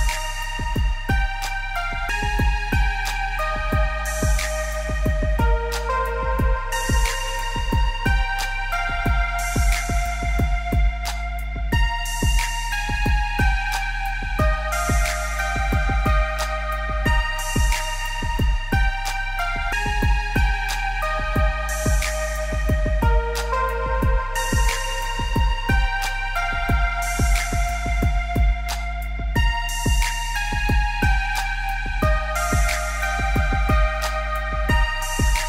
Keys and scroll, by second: 27.4 ctrl+z.